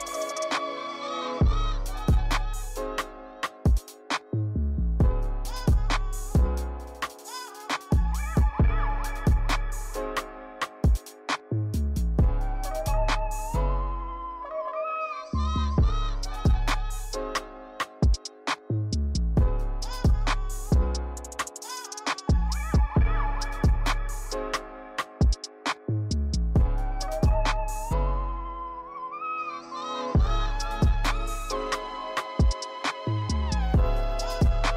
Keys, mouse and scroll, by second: 3.7 click, 7.2-9.9 drag, 9.9-10.3 scroll down 1, 10.3-10.8 shift+middle drag, 10.8-11.2 scroll down 3, 11.2-11.7 shift+middle drag, 11.7 scroll down 2, 12.0 click, 12.8-13.4 shift+middle drag, 13.4 click, 14.1 click, 15.0 click, 16.0-17.6 drag, 17.6 scroll up 6, 19.5-21.1 drag, 21.1-22.0 scroll down 7, 22.0-22.7 shift+middle drag, 22.7-23.2 scroll down 1, 23.2-24.1 shift+middle drag, 24.1-25.1 scroll up 6, 25.1 click, 26.0 click, 28.8 click, 29.2 click, 30.1 click, 32.2-33.0 scroll down 5, 33.2-33.8 shift+middle drag, 33.8 scroll down 2, 34.5 click.